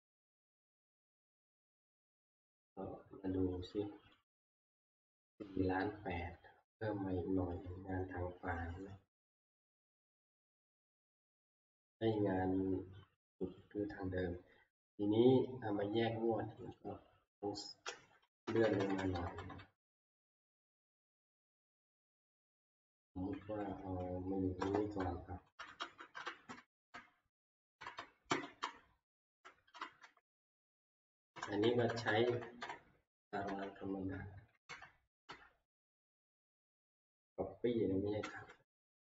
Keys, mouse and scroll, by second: 1.8 click, 4.3 click, 6.8-12.4 drag, 13.6 click, 16.7 click, 18.3 Right, 18.4 Right, 18.6 Right, 18.8 Right, 19.0 Right, 19.2 Right, 19.4 Right, 19.9-20.6 Down, 21.0 Down, 21.2 Down, 22.1 ctrl+c, 22.4 Down, 22.9-23.3 Down, 23.5 Down, 23.7 Down, 24.6 Return, 25.8 Up, 26.5 Up, 27.1-27.5 Right, 27.5 Down, 27.5 Return, 27.8 Right, 28.3 Right, 28.6-29.4 Up, 29.7 Up, 30.0 Down, 30.7 Delete, 31.1 Right, 31.4 Right, 31.6 Right, 31.9 Right, 32.1 Right, 32.3 Right, 33.4 Right, 34.7 ctrl+shift+Right, 35.3 ctrl+shift+Right, 35.8 ctrl+shift+Right, 36.5 ctrl+c, 36.6 ctrl+x, 38.2 ctrl+c.